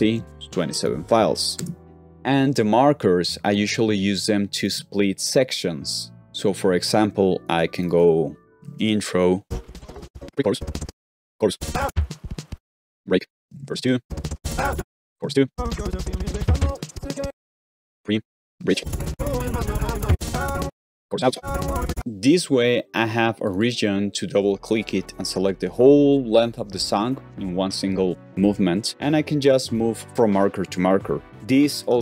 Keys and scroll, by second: 1.5 ↻, 6.2 shift+4, 8.5-15.5 typing, 8.7 Return, 14.0 Return, 17.1-18.9 typing, 20.0-21.9 typing, 31.9 shift+'.